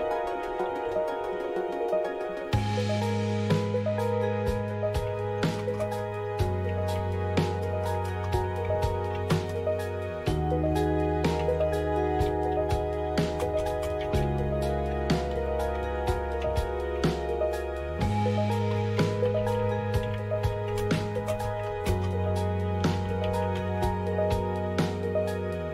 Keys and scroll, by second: 0.0-1.3 typing, 4.8 Return, 4.8-24.0 typing.